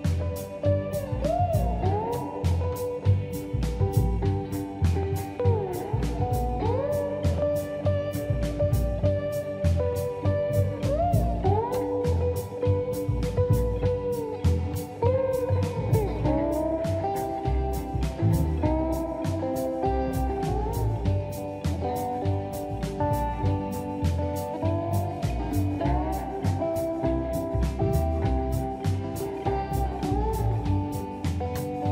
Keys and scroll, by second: 2.5 Escape, 11.5 m, 13.0 space, 22.1 space, 22.8 e, 23.2 space, 25.2 space, 27.1 g, 28.9 Escape.